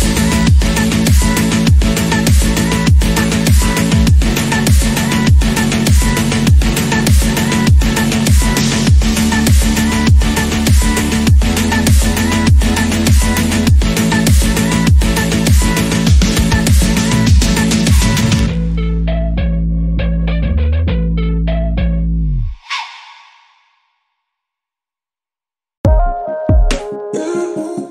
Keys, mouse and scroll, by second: 1.7 click, 2.7 scroll down 1, 3.0-4.0 shift+middle drag, 4.0 shift+click, 4.8 click, 6.0 scroll up 2, 6.3 shift+middle click, 6.6-7.2 scroll up 2, 7.4 2, 8.1 alt+click, 8.7 alt+click, 9.5 ctrl+x, 9.8 scroll down 2, 10.2 shift+middle click, 10.5 scroll down 1, 11.0 shift+middle click, 11.4-12.1 scroll up 1, 12.1-13.0 scroll up 6, 12.3 shift+middle click, 13.0 shift+middle click, 13.5 alt+click, 13.8 alt+click, 14.4 ctrl+x, 14.6-15.2 scroll down 4, 15.2 1, 15.6 click, 16.0 scroll down 4, 16.2 shift+middle click, 16.8 shift+click, 17.5 click, 18.5 click, 18.8 scroll down 1, 19.0 shift+middle click, 19.3 scroll up 3, 19.5 shift+middle click, 19.8 Tab, 20.3 alt+z, 20.5 click, 20.7 scroll down 1, 21.0-23.0 middle drag, 23.0 scroll up 1, 23.2 KP_1, 24.0-25.0 drag, 25.0 Tab, 25.3 Tab, 25.7 click, 25.8 Tab, 26.2 alt+z, 27.8 click.